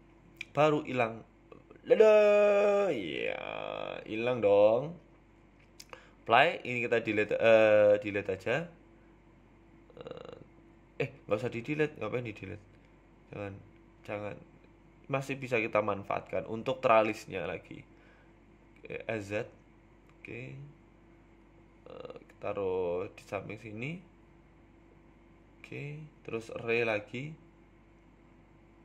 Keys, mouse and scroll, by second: 1.3 middle click, 1.9 right click, 3.5 h, 3.9 middle click, 5.0 ctrl+z, 5.5 click, 6.0 right click, 6.5 click, 6.8 click, 7.3 right click, 7.7 KP_1, 9.3 Delete, 10.0 ctrl+z, 10.7 s, 11.4 r, 12.6 s, 13.6 s, 15.2 s, 16.4 s, 17.3 z, 18.1 scroll up 1, 18.2 shift+middle click, 18.6 s, 20.2 s, 21.9 g, 22.1 y, 22.5 x, 23.5 g, 25.4 s, 26.1 s, 27.7 click.